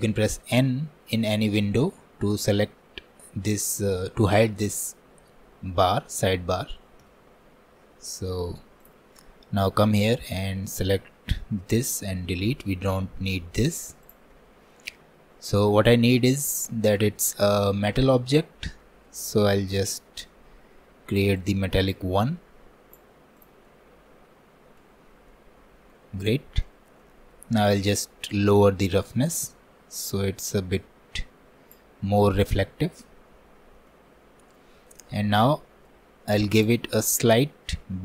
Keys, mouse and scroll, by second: 7.1 n, 8.8 click, 9.2-10.3 middle drag, 10.3-12.3 drag, 12.3 Delete, 13.6 middle click, 14.1 click, 14.3-19.3 middle drag, 19.3-20.0 scroll up 1, 20.0-21.4 middle drag, 21.4-23.7 drag, 23.7-25.0 middle drag, 25.0 scroll up 1, 25.3 middle click, 26.1 scroll down 1, 26.4-28.3 middle drag, 28.3-32.1 drag, 32.1-35.1 middle drag, 35.1-35.5 scroll up 1, 35.5-36.6 middle drag, 36.6 click.